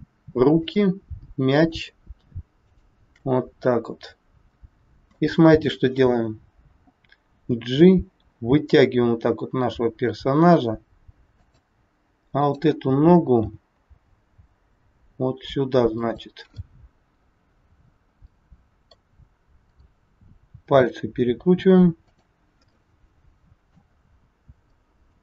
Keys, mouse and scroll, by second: 0.6 shift+click, 1.5 shift+click, 3.6 middle click, 7.2 g, 12.4 click, 13.5 g, 16.6 middle click, 19.6 click, 20.6 r, 22.6 middle click.